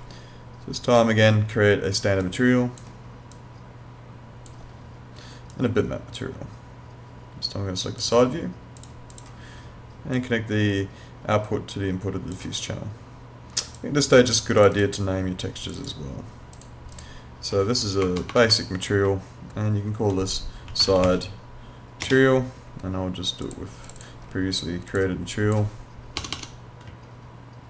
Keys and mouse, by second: 2.3 click, 13.7 click, 18.1 BackSpace, 19.1 Left, 20.7 s, 20.9 i, 21.0 d, 21.1 e, 23.5 click, 26.2 BackSpace, 26.9 Left.